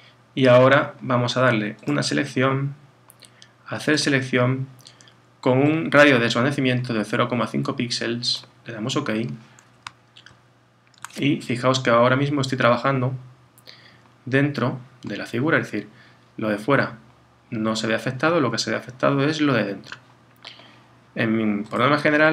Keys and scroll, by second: 10.3 super+-.